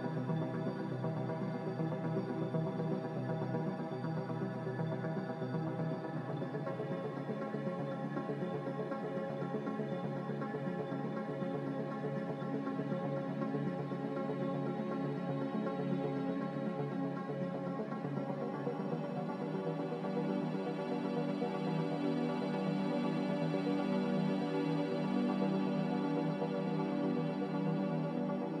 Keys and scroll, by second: 8.2 q, 12.3 q, 13.1 ctrl+j, 16.2-16.9 typing, 21.2 1.